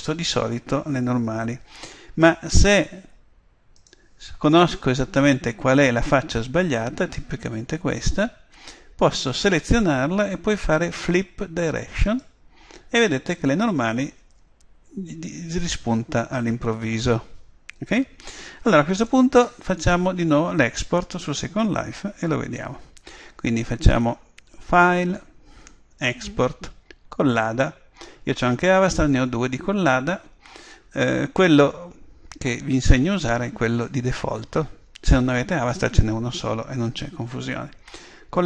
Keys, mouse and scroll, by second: 2.5-4.4 right drag, 3.8 click, 4.4 middle click, 5.6-6.7 middle drag, 7.2-7.9 scroll up 1, 7.9-9.2 middle drag, 9.2-11.1 right drag, 12.1 click, 17.6 middle click, 19.0 Tab, 19.8-21.7 right drag, 24.8 click.